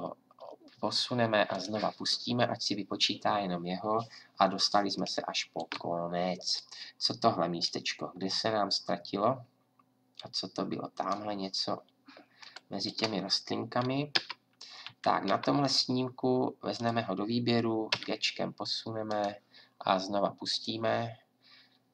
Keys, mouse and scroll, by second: 14.1 Right, 14.9 Left, 15.3 Right, 17.9 g.